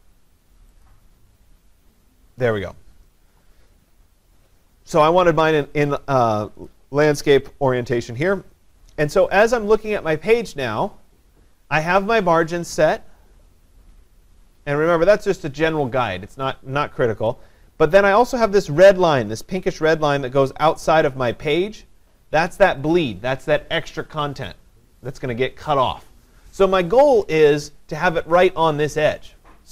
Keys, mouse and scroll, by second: 0.9 click, 6.7 click, 11.7-29.6 drag.